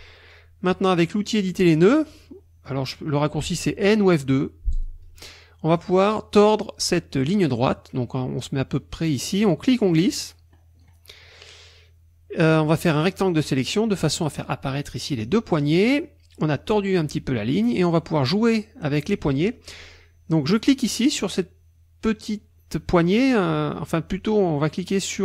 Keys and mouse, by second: 4.7 click, 9.6-11.0 drag, 12.5-13.7 drag, 20.6-22.4 drag.